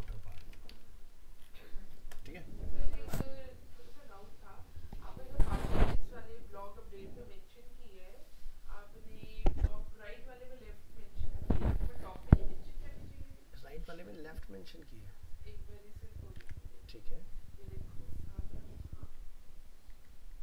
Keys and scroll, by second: 0.1 ctrl+s, 0.5 alt+Tab, 16.4 alt+Tab.